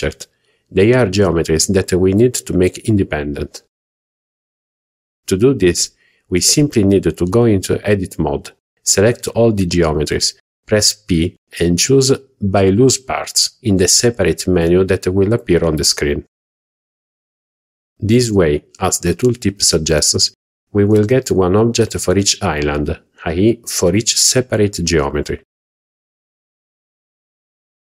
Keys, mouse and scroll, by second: 0.4 Tab, 3.3 Tab, 4.4-4.9 scroll up 2, 9.3-9.9 drag, 11.1 a, 13.9 p.